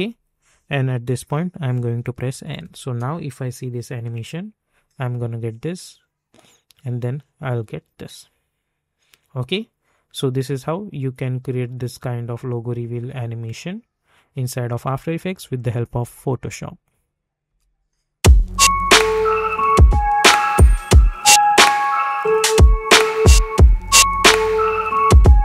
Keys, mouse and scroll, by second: 2.0 n, 2.4 space, 17.4 space.